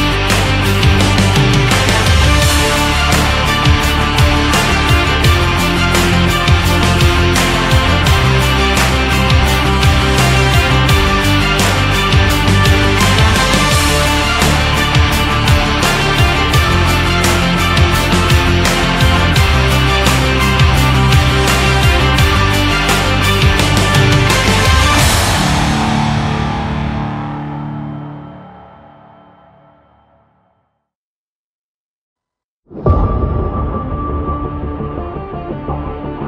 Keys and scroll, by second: 0.0 shift+Up, 0.8 Down, 1.6 Up, 3.1 Up, 3.6 Down.